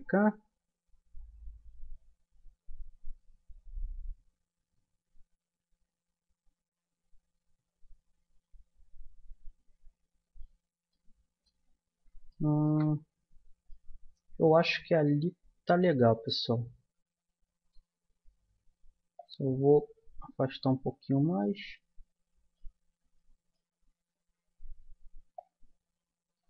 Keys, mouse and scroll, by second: 10.9-15.6 middle drag, 17.9 Tab, 21.0-25.2 middle drag, 24.1 Tab, 25.3-26.4 drag.